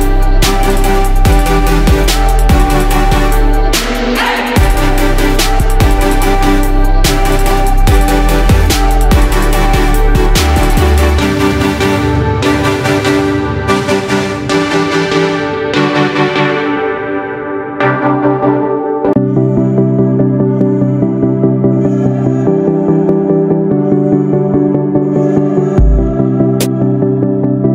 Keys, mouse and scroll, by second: 11.1 shift+click, 22.3 ctrl+d, 22.6-24.5 drag, 24.9 ctrl+d, 25.4-27.0 drag, 27.3 ctrl+d.